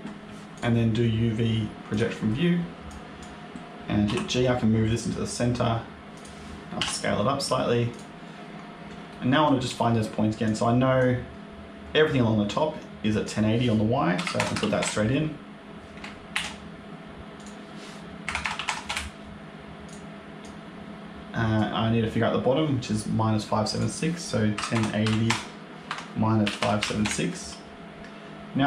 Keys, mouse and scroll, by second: 0.4 click, 2.8 click, 3.9 g, 6.7 s, 8.6 scroll up 1, 9.0 shift+middle click, 10.3 click, 13.1 click, 16.2 ctrl+z, 17.2 click, 19.7 click, 20.3 click, 23.6 click, 28.0-28.6 scroll up 1.